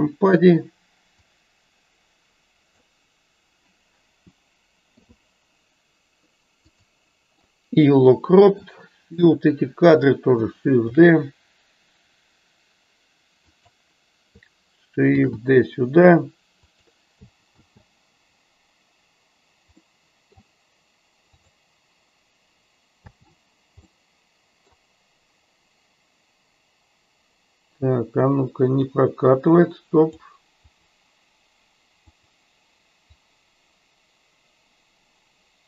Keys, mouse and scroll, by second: 1.5 click, 7.9 middle click, 9.3-10.0 drag, 19.9 middle click, 24.0-24.7 middle drag, 28.9-30.3 drag, 30.9 click, 32.3 click, 33.3-35.6 drag.